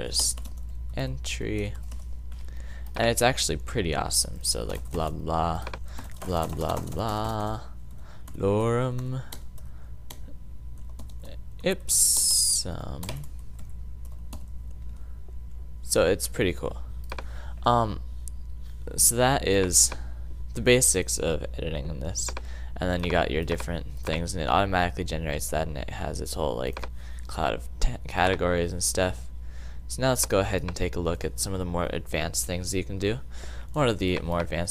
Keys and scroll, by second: 0.0-2.8 typing, 4.4-7.6 typing, 8.7-11.6 typing, 12.8-14.9 typing.